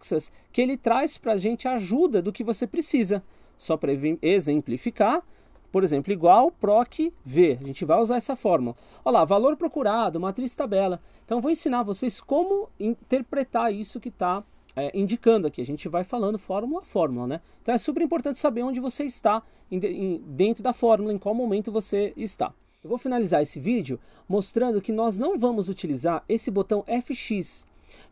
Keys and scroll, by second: 3.5 Escape, 5.5-8.0 typing.